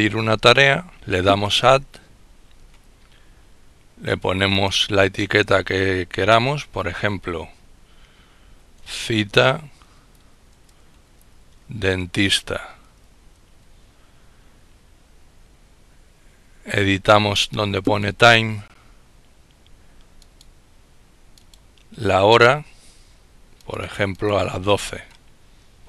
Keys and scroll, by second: 8.8-13.7 typing.